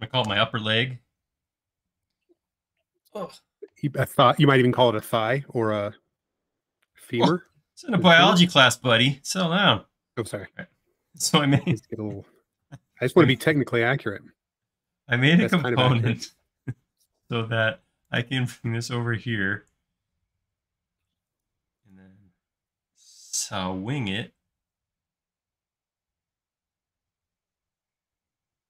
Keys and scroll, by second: 0.0-0.5 typing, 13.3 m, 18.6 q, 20.4 Right, 21.0 Left.